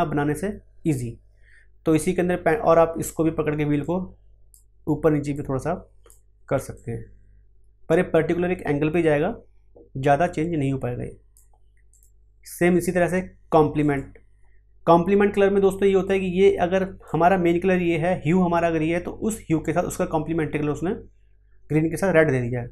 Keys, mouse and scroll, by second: 3.8-11.9 drag, 16.0-22.7 drag.